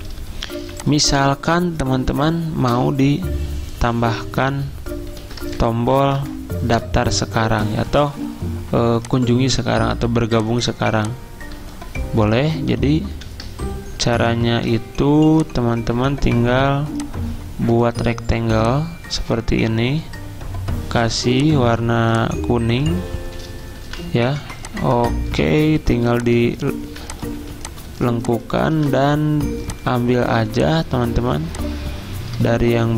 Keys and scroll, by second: 0.6 t, 2.7 BackSpace, 5.2 ctrl+a, 5.6 alt+Up, 6.2 alt+Up, 13.2 alt+Down, 23.9 v, 25.6 a, 26.9-29.2 typing.